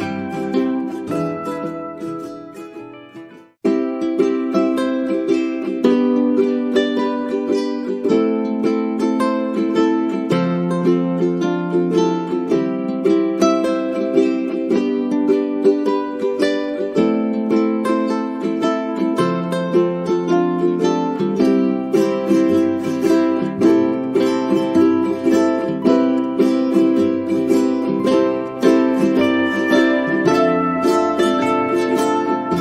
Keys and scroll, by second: 1.2 space, 3.2 space, 18.8 1, 19.1 Return.